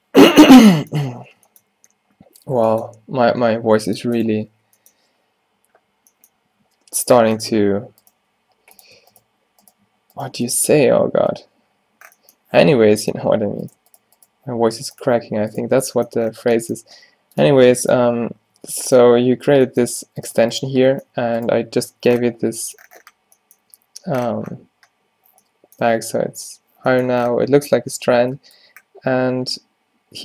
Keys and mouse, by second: 3.7 ctrl+r, 4.5 -, 8.2 g, 10.6 f, 11.2 Tab, 12.8 Tab, 16.9 g, 17.6 Tab, 18.1 Tab, 18.6 Tab, 19.1-22.2 middle drag, 20.1 Tab, 20.4 Tab, 20.8 Tab, 21.2 Tab, 22.0 Tab, 27.6 Tab, 27.9 Tab.